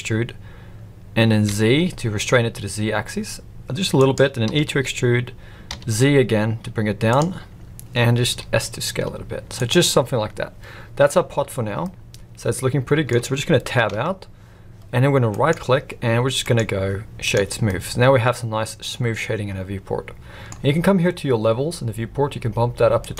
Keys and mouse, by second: 4.5 e, 8.3 s, 11.8-13.0 middle drag, 13.9 Tab, 15.3-15.9 right drag, 16.4-17.3 right drag, 17.7-20.5 middle drag.